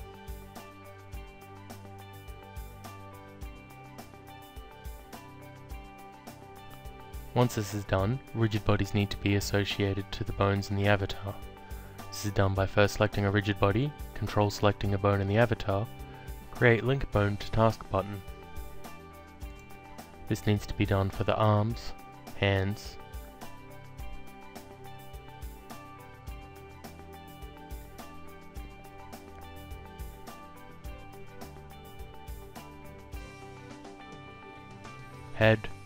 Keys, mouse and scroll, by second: 0.6 alt+click, 4.4 alt+click, 11.4 click, 13.8 ctrl+click, 15.4 click, 16.3 alt+click, 18.7 click, 19.8 ctrl+click, 21.5 click, 23.5 click, 24.2 ctrl+click, 25.6 ctrl+click, 27.6 click, 27.9 alt+click, 29.4 click, 31.8 ctrl+click, 33.1 click, 35.1 ctrl+click.